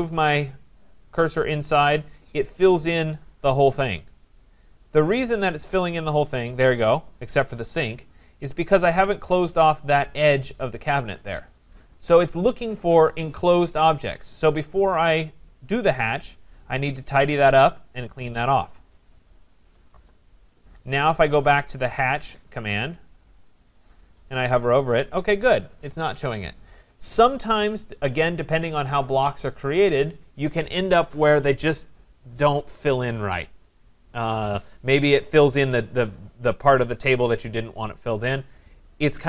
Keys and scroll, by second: 12.0 Escape, 19.9 Return.